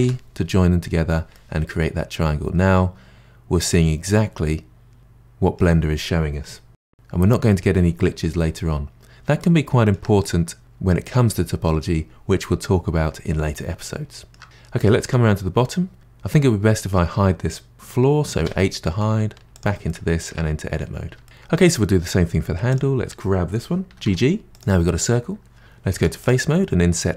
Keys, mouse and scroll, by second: 0.0 j, 1.3-4.3 middle drag, 8.3-9.4 scroll down 4, 9.4-12.6 middle drag, 13.8-16.0 middle drag, 16.0 click, 18.4 h, 19.2-19.5 scroll up 1, 19.5 click, 19.9-20.3 middle drag, 20.3 Tab, 20.7-21.2 scroll up 2, 22.7 click, 23.9 g, 26.0 3, 26.2 click.